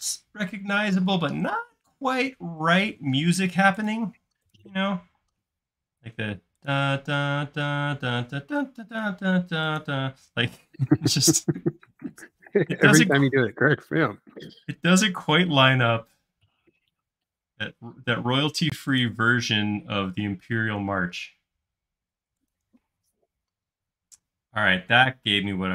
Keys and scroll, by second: 1.1 space, 3.7 space, 5.2 m, 23.0 space.